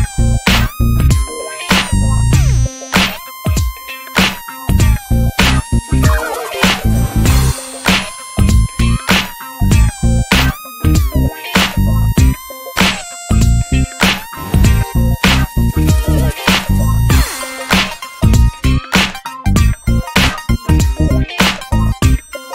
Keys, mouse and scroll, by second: 1.0 click, 2.2 click, 2.3 middle click, 3.4 alt+middle click, 4.0 click, 4.8 shift+d, 8.4 click, 8.9 click, 9.3 click, 9.9 middle drag, 10.2 scroll down 1, 10.3 middle click, 10.4 scroll up 1, 10.5-11.9 shift+middle drag, 11.9-22.5 drag.